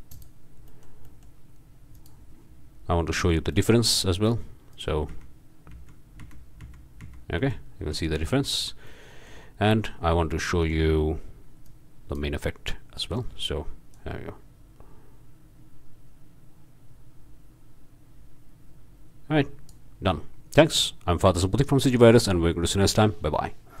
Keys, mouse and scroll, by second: 0.1 click, 0.7 click, 1.9 click, 3.1-3.5 scroll up 1, 3.5 click, 4.0 scroll down 1, 4.7 click, 5.1 m, 8.6 drag, 8.6 m, 9.4-10.1 scroll up 1, 10.1 click, 10.5-10.9 scroll up 1, 10.9 click, 11.7 scroll up 1, 11.8 click, 13.0-13.4 drag, 13.9-18.4 drag, 19.0 drag, 19.9 click.